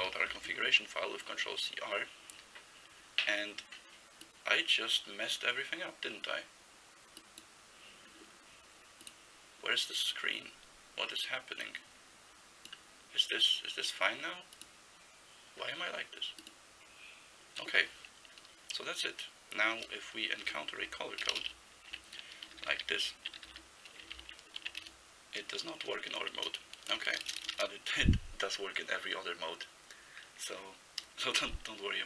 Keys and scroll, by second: 0.1 r, 19.9 Return, 20.5 BackSpace, 20.8 Down, 21.3 Return, 21.4 Return, 21.9-24.0 typing, 24.2 ctrl+n, 24.8 Return, 26.4-27.6 typing.